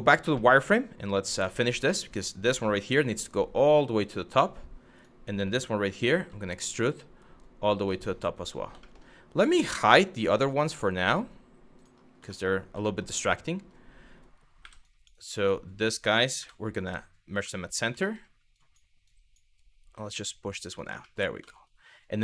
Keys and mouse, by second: 0.1 middle click, 0.7 click, 1.7 click, 2.5 g, 3.9 click, 4.6 click, 5.7 e, 8.0 click, 8.5 middle click, 9.6 click, 10.0 click, 11.4 click, 12.0 shift+middle click, 12.5 shift+middle click, 14.2 1, 14.6 click, 15.1 click, 16.0 m, 17.0 shift+middle click, 17.7 middle click, 18.3 click, 18.8 click, 19.6 g, 20.3 click, 20.6 shift+middle click, 21.2 shift+middle click, 22.0 shift+middle click.